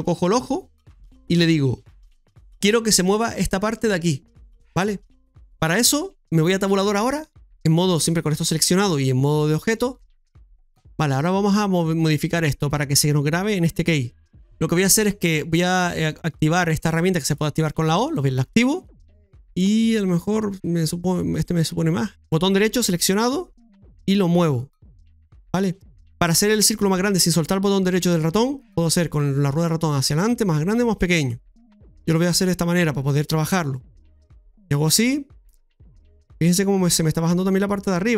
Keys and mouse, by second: 6.8 Tab, 11.5 middle click, 16.1 click, 18.1 click, 19.5-21.2 drag, 22.4-35.0 right drag, 35.9-36.7 typing, 36.2-38.1 right drag.